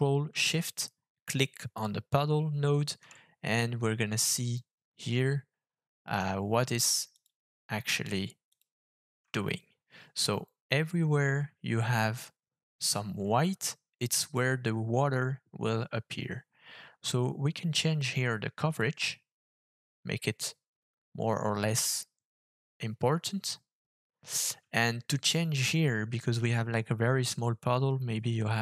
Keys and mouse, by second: 7.1 ctrl+shift+click, 8.5 ctrl+shift+click, 18.9-24.3 shift+drag.